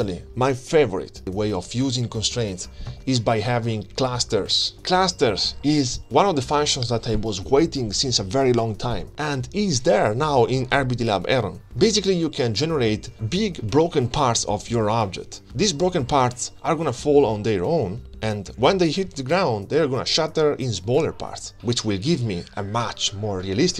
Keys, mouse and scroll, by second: 1.7 click, 3.8 click, 4.4 alt+shift+z, 4.6 click, 4.8 middle click, 4.8 scroll down 2, 4.9 scroll up 3, 5.0 middle click, 5.0 scroll down 1, 5.8-6.9 drag, 7.0-8.7 drag, 9.0 click, 9.8 middle click, 9.8 click, 10.1 click, 10.6-11.7 click, 11.9 click, 13.2 click, 13.4 click, 14.7-16.9 drag, 15.5 Left, 17.2 click, 19.4 click, 21.4-21.8 scroll down 4, 21.6 click, 22.6 click.